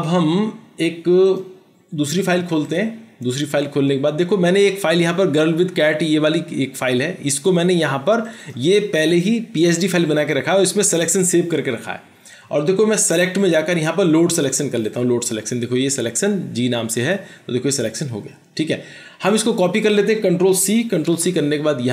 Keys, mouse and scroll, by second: 8.5 double click, 21.1 ctrl+c.